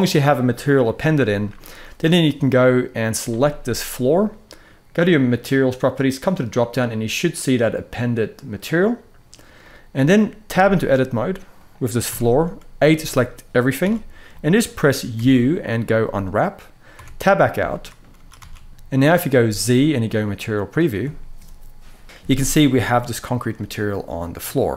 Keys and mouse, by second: 3.3-3.9 middle drag, 5.9-8.4 drag, 9.3 middle click, 10.2 `, 11.9 Tab, 12.6 q, 13.5 a, 14.1 middle click, 14.9 u, 16.7 Tab, 16.9 middle click, 17.9 ctrl+s, 18.2 ctrl+s, 19.1 z, 22.3-22.7 middle drag, 23.4-24.6 middle drag.